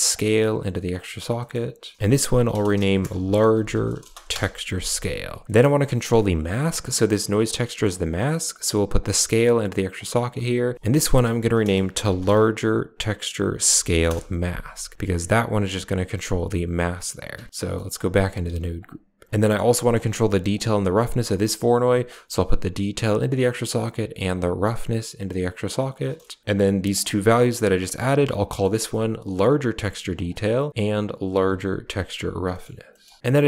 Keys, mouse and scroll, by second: 0.0-0.9 drag, 2.0-4.2 drag, 5.4 middle click, 5.8 middle click, 6.4 drag, 6.6 scroll up 1, 6.6 middle click, 6.8 g, 7.5 scroll down 1, 8.9-9.8 drag, 10.7 click, 14.8 Tab, 17.4 Tab, 17.6 middle click, 18.7 g, 19.3 middle click, 19.6 middle click, 20.5 drag, 21.9-23.4 drag, 24.2-25.3 drag, 26.8-29.6 drag, 30.0 click, 30.1-31.8 drag.